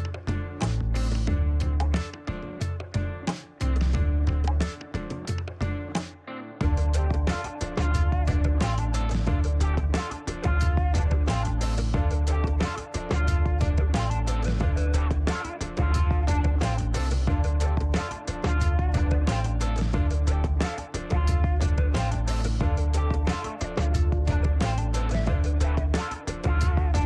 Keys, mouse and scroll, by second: 1.3 scroll up 1, 2.0 scroll up 1, 2.6 middle click, 5.6 click, 8.1 click, 9.1 scroll down 2, 9.5 middle click, 10.2 shift+right click, 13.7 middle click, 14.3 shift+right click, 15.5 shift+middle click, 16.1-16.7 scroll up 2, 18.3 click, 20.5 click, 21.4 middle click, 21.7-22.0 scroll up 3, 22.3 middle click, 23.2 scroll up 2, 23.7 middle click, 26.0 click.